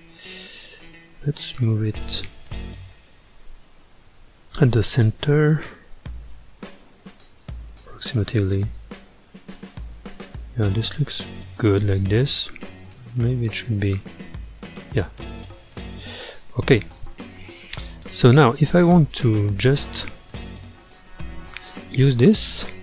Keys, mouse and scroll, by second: 0.3-2.6 middle drag, 2.6 ctrl+KP_1, 4.2 g, 9.2-12.2 middle drag, 13.9 click, 15.2-16.7 middle drag, 16.7-17.1 scroll down 4, 17.1-22.8 middle drag.